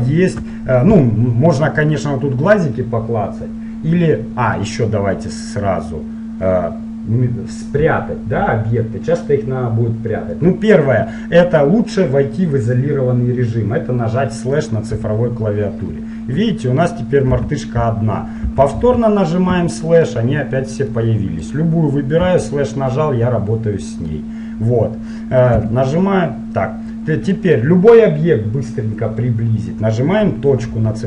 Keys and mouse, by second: 4.7-6.5 middle drag, 6.5-10.4 middle drag, 15.1 KP_Divide, 16.3-18.2 middle drag, 17.5 t, 18.6 t, 18.9 n, 19.6 KP_Divide, 22.5 KP_Divide, 25.7 KP_Divide, 27.5-30.8 drag, 30.8 KP_Decimal.